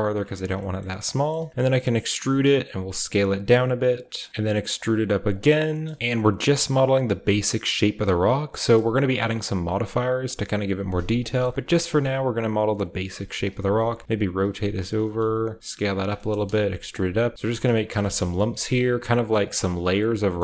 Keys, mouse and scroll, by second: 0.4-1.3 scroll down 1, 0.6-3.9 shift+drag, 0.6-1.5 typing, 1.3-3.9 shift+scroll up 1, 2.6 typing, 4.1 click, 4.3 Up, 4.3 Tab, 4.3 middle click, 4.3-5.2 scroll up 1, 4.3 e, 5.2 click, 5.2 scroll up 1, 5.9 s, 6.4 e, 6.8-8.7 drag, 7.0 s, 8.7-9.9 typing, 9.0-11.1 shift+drag, 11.5 e, 11.8 click, 11.8 s, 12.7 click, 12.9-18.4 typing, 13.4 click, 13.7 click, 14.1 click, 14.9 click, 15.2 click, 15.9 shift+click, 16.9 click, 17.4 click, 17.9 shift+click.